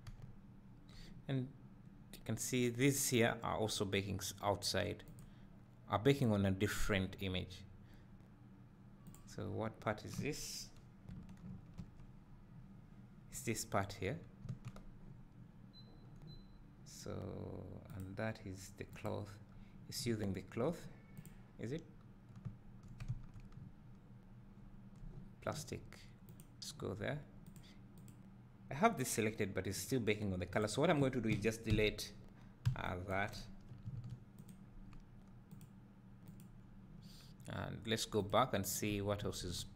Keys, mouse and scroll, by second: 0.2 `, 11.5 ctrl+l, 14.7 Tab, 19.2 click, 20.0 `, 21.3 click, 22.5 `, 23.3 Tab, 26.4-26.7 drag, 28.0 click, 32.4 Delete, 34.4-36.4 drag, 38.4-38.7 drag, 39.1 Tab.